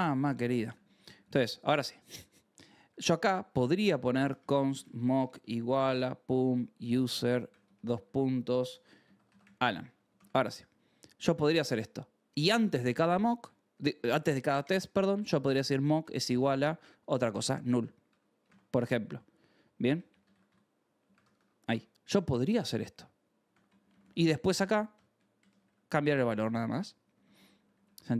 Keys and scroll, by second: 0.0-0.8 typing, 2.3-10.5 typing, 10.1 ctrl+s, 10.8 Escape, 11.3 ctrl+s, 12.2 j, 12.6 shift+v, 13.1 Escape, 13.5 k, 13.8 o, 14.9-15.9 typing, 17.0-21.6 typing, 18.4 ctrl+s, 23.4 ctrl+s, 23.6 j, 24.6-26.9 typing.